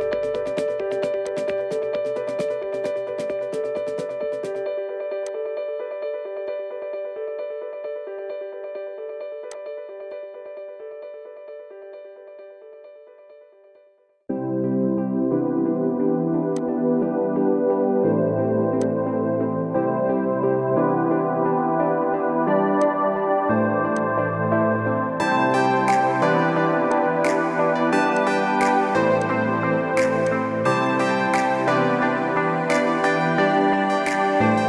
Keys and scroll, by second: 2.4 Return, 3.4 ctrl+=, 3.7 ctrl+=, 7.4 ctrl+=, 7.8 ctrl+=, 7.8 ctrl+=, 10.5 ctrl+=, 10.6 ctrl+=, 14.0 Return, 20.0-20.9 typing, 34.4 ctrl+-, 34.6 ctrl+-.